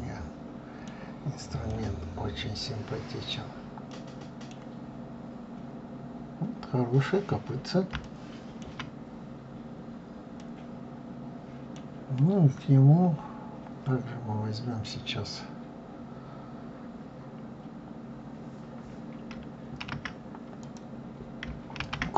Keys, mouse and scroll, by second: 1.1-1.7 scroll down 2, 1.7-4.8 middle drag, 4.8-5.8 scroll down 2, 5.9-6.7 scroll up 2, 6.7-8.0 scroll down 2, 8.0-9.1 shift+middle drag, 9.1-9.7 scroll up 2, 9.7-10.4 scroll down 1, 10.4-13.4 middle drag, 20.6-21.8 drag, 21.8 shift+a.